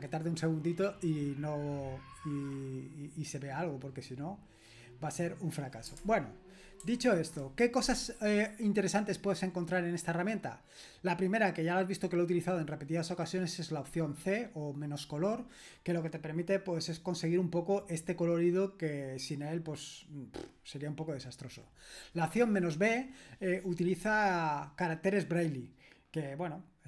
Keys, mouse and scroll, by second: 3.3-6.8 drag, 6.8 super+h, 13.2-14.4 drag, 15.0 click, 15.2 click, 17.1 click, 18.6-19.3 scroll down 1, 19.3-21.2 scroll down 1, 21.2-23.2 scroll down 1, 23.2-24.6 scroll down 1, 24.6-25.6 scroll down 1, 25.6-26.8 scroll down 1.